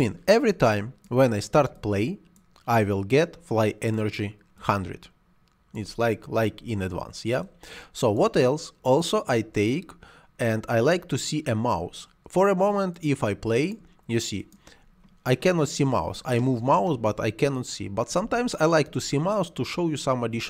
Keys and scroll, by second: 18.0 Escape.